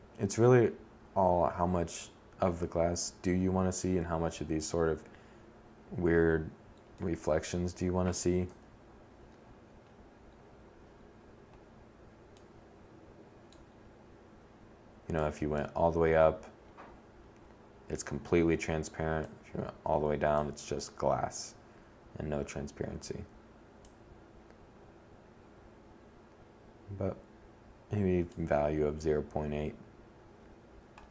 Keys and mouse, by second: 5.5-6.3 middle drag, 7.1 7, 13.7 middle click.